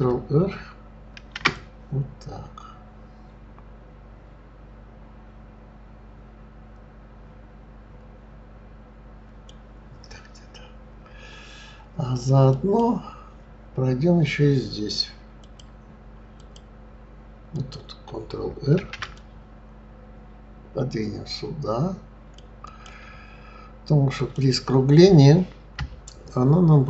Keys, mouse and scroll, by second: 1.1 ctrl+r, 15.4 click, 16.4 click, 17.5 click, 18.7 ctrl+r, 24.2 click.